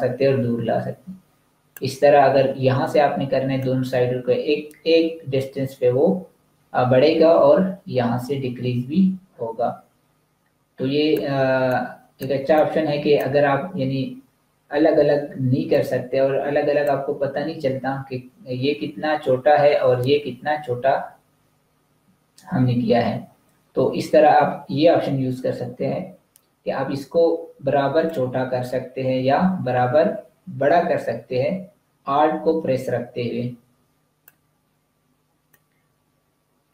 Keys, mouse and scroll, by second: 3.5 alt+click, 11.5 click, 12.3 space, 12.5 click, 12.8 space, 15.6 click, 27.9 alt+click, 35.3 click.